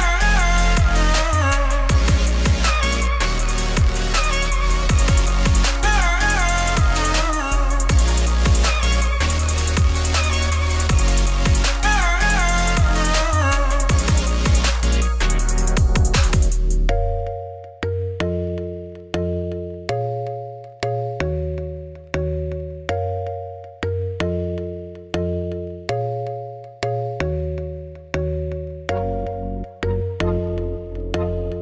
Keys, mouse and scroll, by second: 1.3 shift+s, 1.8 KP_7, 2.6 shift+a, 3.2 Tab, 3.3 s, 6.8 KP_1, 7.8 g, 11.8 KP_7, 12.4 Tab, 12.5 g, 16.3 click, 17.3 g, 19.5 click, 20.0 g, 21.2 Tab, 21.4 2, 21.6 click, 22.1 KP_1, 22.5 middle click, 23.1 KP_3, 24.1 1, 24.3 scroll up 2, 24.5 g, 29.5 KP_1, 30.3 g, 30.9 middle click, 31.1 3, 31.2 click, 31.4 middle click.